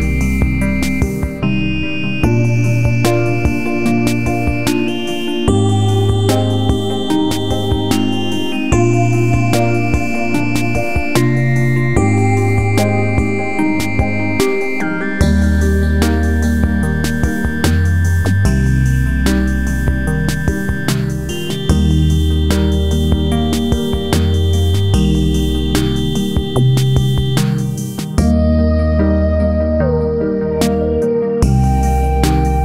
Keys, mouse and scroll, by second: 0.8 Down, 2.0-4.0 drag, 4.0-5.4 drag, 5.4-6.8 drag, 7.7 Right, 8.2 Left, 9.1 Right, 9.9-12.7 drag, 12.7 Right, 14.9 click, 16.1 F4, 16.4-17.5 drag, 18.1 F4, 18.4 click, 19.7 scroll up 1, 20.4-24.4 drag, 24.4-26.7 drag, 26.8 F4, 29.7 click, 31.3 click, 31.9-32.6 drag.